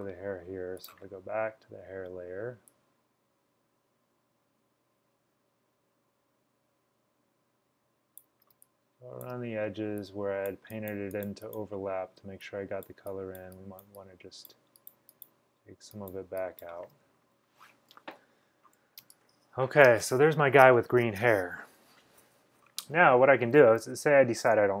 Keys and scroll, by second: 8.6-9.4 typing, 19.1-19.9 typing, 22.6-23.3 typing.